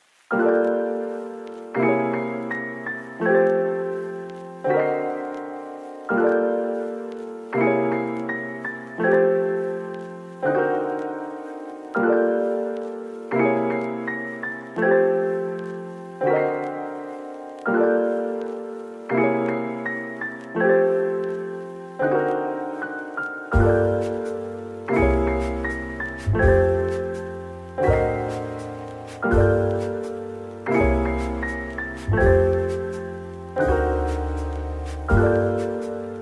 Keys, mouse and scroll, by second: 3.2 middle click, 3.6 scroll up 1, 4.5 double click, 8.3 scroll down 1, 20.7 ctrl+z, 21.2 ctrl+z, 21.4 ctrl+z, 21.7 scroll down 1, 22.3 middle click, 23.2 z, 24.6-25.2 scroll down 1, 25.2 middle click, 28.2 middle click, 31.6 typing, 34.1-34.8 typing.